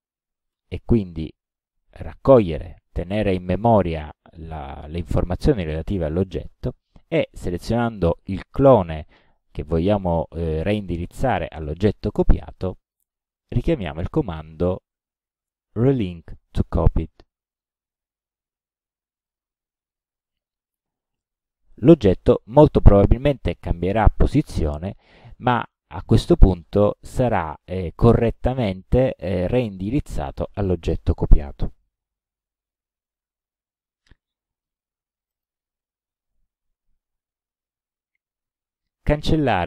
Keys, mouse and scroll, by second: 0.6 ctrl+c, 7.4 click, 12.9 click, 17.6 click, 19.3-20.6 drag, 25.4-26.4 drag, 35.4 click, 39.2 Delete.